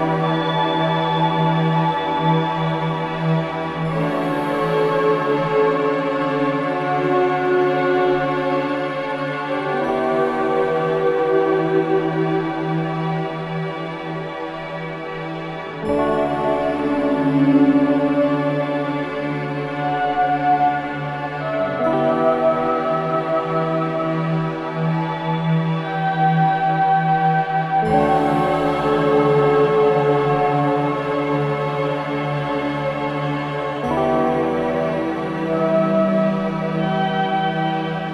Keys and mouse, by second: 0.0 click, 2.3 click, 2.9 click, 3.4 click, 4.5 KP_2, 4.7 KP_0, 4.8 KP_0, 5.0 Return, 5.9 click, 6.3 space, 6.5 click, 9.7 space, 10.9-11.7 drag, 12.5 click, 14.2 click, 15.9 click, 16.5 space, 18.3 space, 18.9-19.7 drag, 19.4 space, 22.4 space, 23.0 click, 23.3 space, 26.1 space, 27.5 click, 27.9 space, 31.6-33.9 drag, 37.3 click, 37.7 click, 37.7 space.